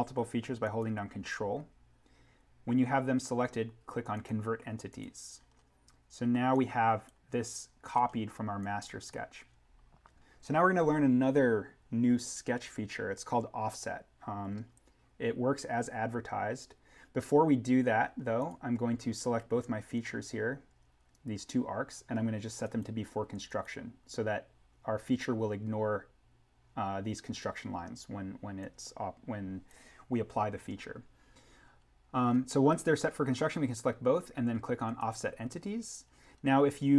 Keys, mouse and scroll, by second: 5.3-6.5 scroll down 1, 6.5 click, 7.8-8.5 scroll up 1, 8.5 click, 14.6-15.9 scroll down 1, 18.3-22.1 drag, 22.6 click, 25.7 click, 28.6 click, 32.0-33.9 scroll down 1, 34.8 click, 36.0-36.9 scroll down 1.